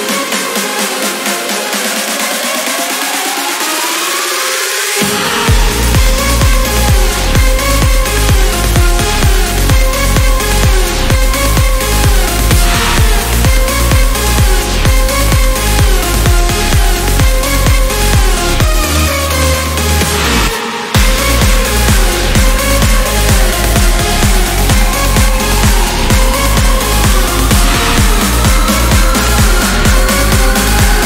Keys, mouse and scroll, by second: 0.1 click, 2.2 scroll down 1, 2.8 scroll up 2, 3.4 Escape, 3.9 click, 4.8 click, 5.2 click, 6.3 click, 7.1 Delete, 8.0 scroll down 2, 8.3 scroll up 2, 9.8-12.0 drag, 13.0 click, 14.4 click, 15.6 click, 16.3 0, 17.0 scroll down 2, 17.6 scroll up 2, 19.9 click, 21.6 click, 23.4 click, 25.0 click, 27.2 click, 28.9 click, 30.1 4, 30.8 click.